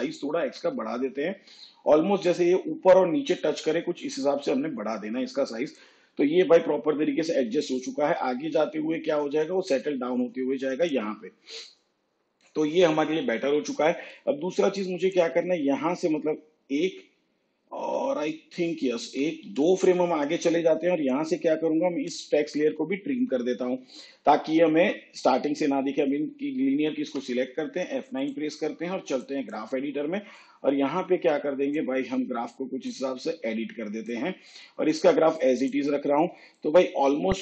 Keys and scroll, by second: 16.6 ctrl+Right, 18.3 ctrl+Left, 19.0 ctrl+Right, 22.0 alt+[, 26.9 F9.